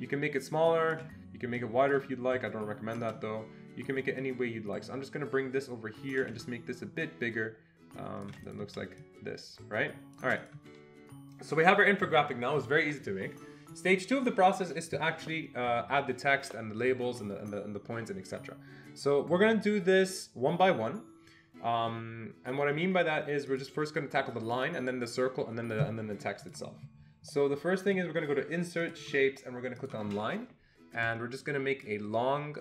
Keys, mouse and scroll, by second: 0.2 shift+click, 3.0 ctrl+z, 7.1-13.1 shift+drag, 23.5-24.6 shift+drag, 26.4 click, 27.9 click, 29.8 click, 32.2-32.6 shift+drag.